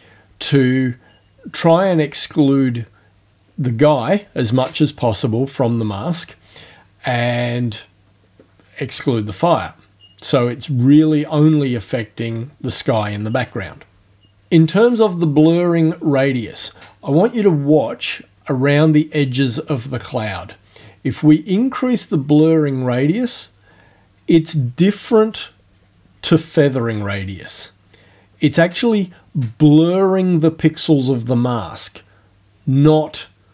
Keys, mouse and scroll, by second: 21.6-25.5 drag.